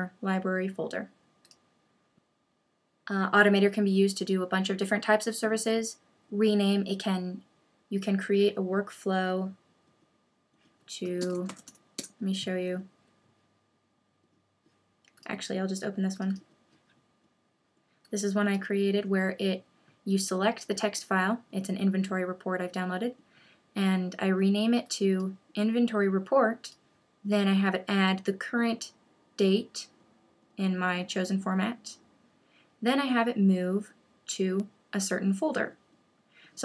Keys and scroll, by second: 11.2 super+space, 12.0 Return.